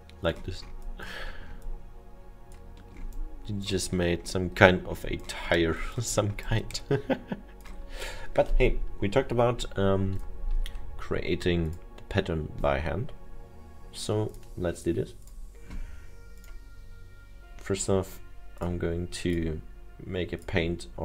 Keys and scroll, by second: 10.7 Delete.